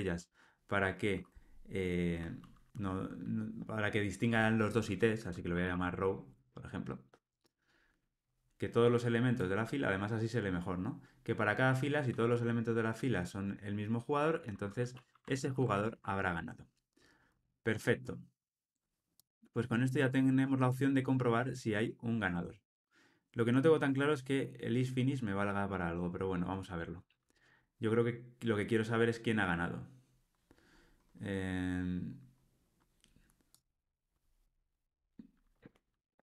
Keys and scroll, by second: 15.4 alt+super+l, 15.7 ctrl+alt+o.